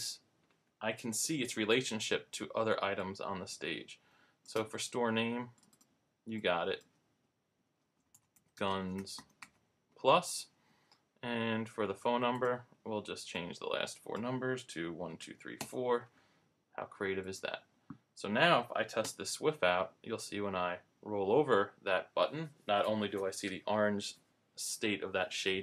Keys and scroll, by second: 7.6-9.6 typing, 14.7-16.2 typing, 17.3-17.7 typing, 19.0 super+Return.